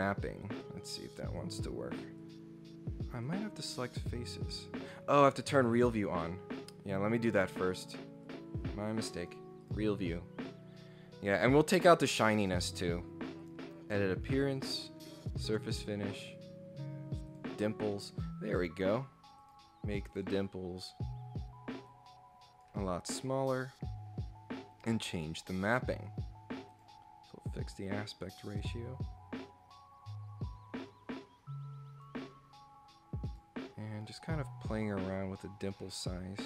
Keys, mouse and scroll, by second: 0.4 click, 2.2 click, 3.2 click, 4.2 click, 5.6 click, 7.3 click, 8.2 click, 9.2 click, 9.6 click, 10.8 scroll down 1, 10.9 scroll up 1, 12.7 right click, 13.4 click, 15.2 click, 16.4 click, 17.3 click, 19.4 click, 20.1 click, 21.9 click, 23.6 click, 26.7 click, 28.3-32.0 drag, 33.3 click, 34.7-36.4 drag.